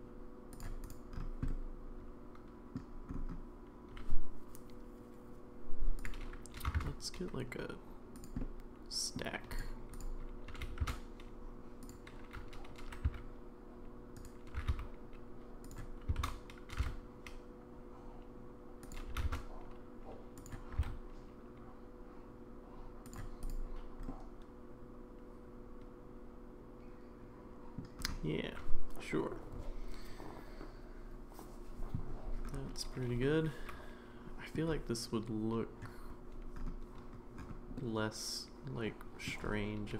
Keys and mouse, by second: 1.5-2.8 middle drag, 6.0 click, 6.5 g, 8.4 middle click, 9.5 click, 10.0 click, 10.5 g, 12.8 g, 14.6 r, 16.2 shift+d, 19.1 g, 20.7 g, 24.1-27.8 middle drag, 33.2-34.5 middle drag, 37.8-39.3 middle drag.